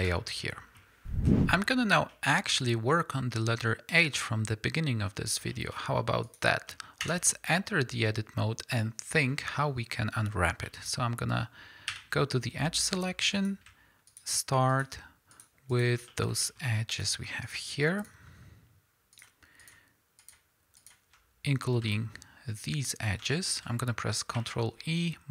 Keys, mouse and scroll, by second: 0.0 ctrl+space, 1.4 click, 2.1-2.9 middle drag, 3.3-4.7 middle drag, 5.5 shift+middle click, 5.7 shift+scroll up 1, 6.2 click, 6.7 middle click, 7.0 Tab, 7.5 middle click, 11.9 2, 12.8 middle click, 13.3 click, 14.1 shift+click, 14.7 shift+click, 15.3 shift+click, 15.7 shift+click, 16.1-16.9 middle drag, 16.9 shift+drag, 17.4 shift+drag, 18.0 shift+click, 19.1 shift+click, 19.6 shift+click, 20.2 shift+drag, 20.8 shift+click, 21.9-23.7 shift+middle drag, 22.2-23.2 scroll down 2, 24.3 ctrl+e.